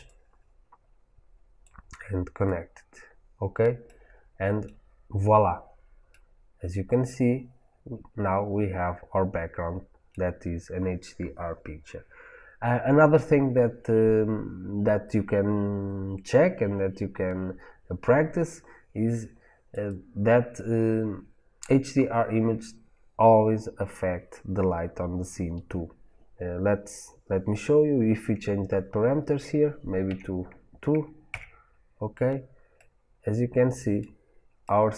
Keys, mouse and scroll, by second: 0.0 click, 1.5-2.7 drag, 2.8 click, 3.8-19.6 middle drag, 6.6 scroll down 1, 19.6-31.9 drag, 31.9 KP_Enter, 32.3 click, 32.7 middle click, 33.7-34.9 middle drag.